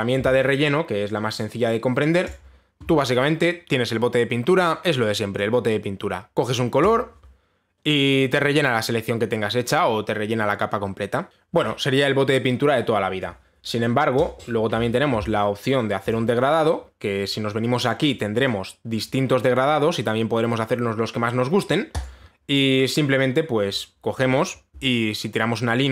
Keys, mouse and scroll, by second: 2.9 click, 6.0 click, 7.5 click, 11.3 ctrl+shift+a, 11.3 ctrl+z, 11.3 click, 14.8 click, 16.8 click, 18.8 click, 19.1 click, 19.7 click, 22.6 click.